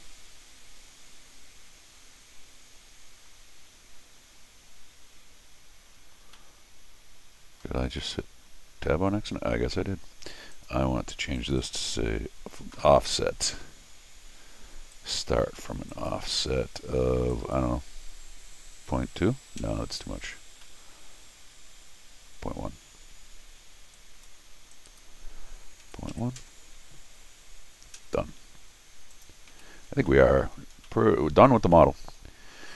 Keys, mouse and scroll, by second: 3.5 scroll down 2, 6.4 middle click, 7.1 middle click, 8.0 middle click, 8.8 scroll down 2, 10.5 click, 11.4 click, 11.6 click, 14.9 click, 15.9 click, 17.3 click, 20.6-22.2 middle drag, 23.9 click, 24.7 click, 29.1 click, 30.8 middle click, 31.7 middle click.